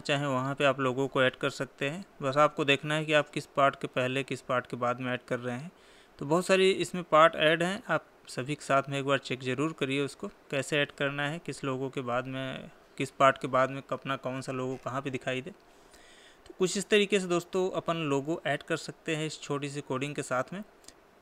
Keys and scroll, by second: 1.8 Tab, 11.5 Tab, 16.4 Escape.